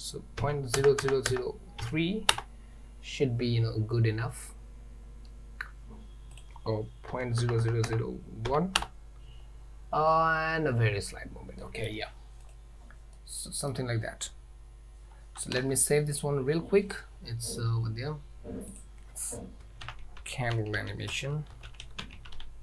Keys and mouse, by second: 1.1 KP_0, 6.4-9.4 drag, 7.7 KP_0, 11.6-12.0 middle drag, 12.5 click, 13.2-13.8 middle drag, 15.4 ctrl+s.